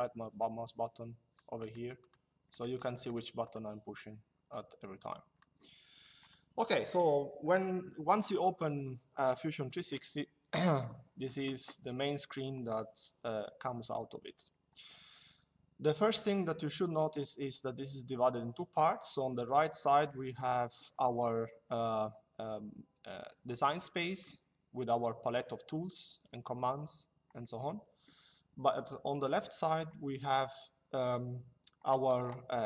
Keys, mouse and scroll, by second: 4.6 click, 5.9 click.